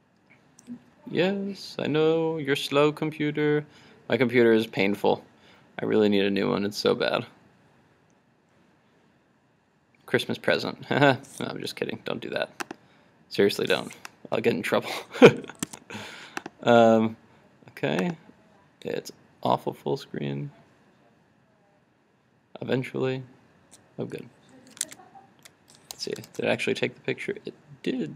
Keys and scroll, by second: 24.9 super+Tab.